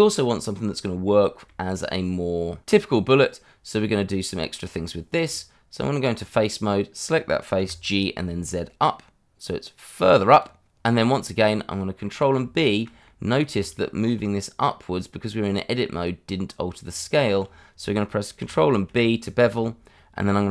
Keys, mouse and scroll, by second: 0.3 click, 1.0 shift+middle click, 1.2 shift+middle click, 4.1 middle click, 5.2 Tab, 6.6 click, 7.6 g, 8.2 z, 10.3 click, 10.6 Tab, 11.4 middle click, 12.5 shift+middle click, 13.5 Tab, 16.8 Tab, 17.6-18.0 scroll up 1, 18.0 middle click, 19.3 ctrl+b.